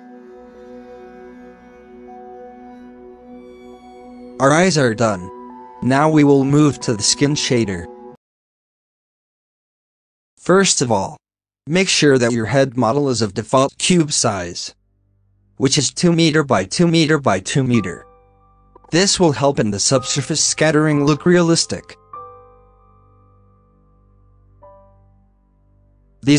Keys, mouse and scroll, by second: 0.2 click, 0.5-0.8 scroll up 8, 1.2-1.6 scroll down 14, 1.7 alt+a, 2.0 shift+middle drag, 2.2 scroll up 5, 2.9 scroll down 5, 3.2-4.5 shift+middle drag, 4.5 ctrl+s, 8.2 scroll down 6, 9.1-9.8 shift+middle drag, 9.8 ctrl+s, 10.2 middle click, 10.3 scroll up 2, 10.6 shift+a, 11.7 scroll down 2, 11.9-22.2 middle drag, 22.2 KP_0, 22.8-23.2 scroll up 1.